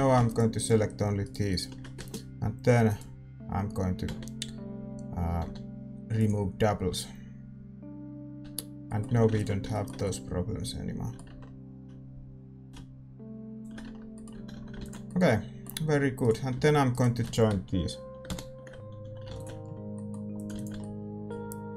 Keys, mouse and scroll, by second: 0.2-6.2 right drag, 6.2 x, 6.2 w, 8.4 Tab, 8.5 middle click, 9.0 a, 9.7 ctrl+s, 11.2 Tab, 12.6-14.5 drag, 13.8 Tab, 14.3-16.9 middle drag, 14.3 a, 14.5 a, 15.0 ctrl+s, 16.2-19.0 right drag, 18.2 ctrl+j, 19.0 a, 19.6 ctrl+s, 19.9-21.7 middle drag, 20.3-21.7 drag.